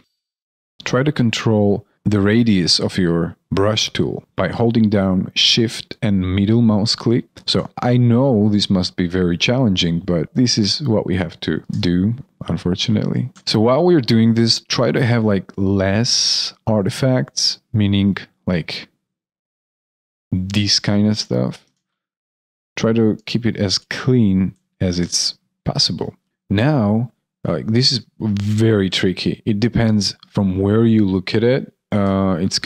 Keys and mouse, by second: 0.7 alt+right click, 1.5 alt+middle click, 2.8 alt+middle click, 2.9 shift+middle click, 7.2 alt+middle click, 10.2 shift+click, 11.5 shift+click, 13.3 alt+right click, 13.6 alt+middle click, 20.6 alt+middle click, 21.5 alt+middle click, 22.1 ctrl+z, 23.1 ctrl+z, 23.6 ctrl+z, 24.5 ctrl+z, 25.1 alt+middle click, 26.0 alt+right click, 26.1 alt+middle click, 26.3 alt+click, 28.8 alt+click, 31.9 alt+click.